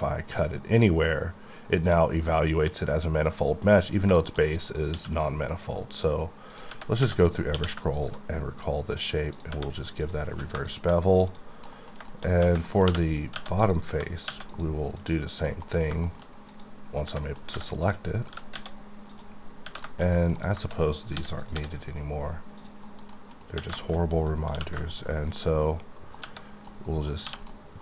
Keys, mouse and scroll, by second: 10.3 q, 10.7 shift+click, 11.6 scroll down 1, 11.7 middle click, 12.3 scroll up 1, 12.7 middle click, 12.9 3, 13.6 click, 14.5 click, 15.0 click, 15.5 middle click, 15.8 scroll down 2, 16.0 shift+middle click, 16.5 middle click, 16.8 click, 17.2 middle click, 17.5 3, 17.8 click, 18.1 scroll up 1, 18.3 g, 18.5 z, 18.8 z, 19.1 click, 19.4-20.4 scroll down 9, 19.9 shift+middle click, 20.4 click, 21.2 h, 21.4 click, 21.5 h, 21.8-22.6 scroll up 1, 22.6 click, 23.8 shift+middle click, 24.0-24.5 scroll up 5, 24.5 q, 24.9 ctrl+click, 26.5 scroll down 4, 26.7 middle click, 26.9 middle click, 27.2 1, 27.5-27.8 middle drag.